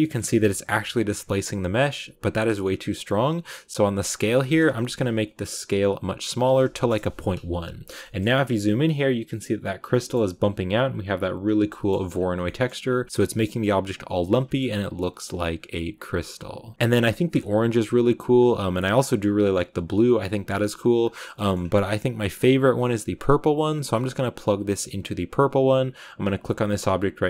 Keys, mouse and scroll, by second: 0.1-0.4 scroll up 2, 0.4-6.8 shift+middle drag, 6.8 click, 7.6 a, 7.9 shift+middle click, 8.1 scroll up 4, 9.9 shift+middle click, 11.3 scroll down 1, 11.6 shift+middle click, 12.1 scroll down 1, 12.3 shift+middle click, 12.8 scroll down 1, 13.0 a, 14.2 scroll down 1, 14.4 shift+middle click, 15.3-16.7 drag, 16.7-17.4 scroll up 1, 17.4-17.9 scroll up 1, 17.9-18.3 scroll up 4, 19.0-20.9 drag, 20.9-21.2 scroll down 1, 21.4 middle click, 21.9-22.5 scroll up 2, 23.8-24.9 drag, 26.5 right click.